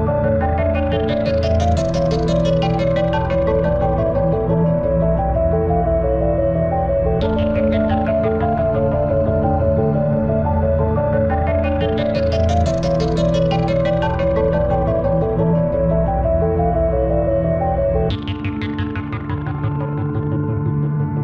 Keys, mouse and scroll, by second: 1.6-4.0 middle drag, 7.0 KP_1, 8.2 KP_1, 8.9 KP_3, 9.2 KP_5, 14.3 s, 14.8 click, 17.7 KP_1, 19.1 KP_3, 19.9-21.2 middle drag.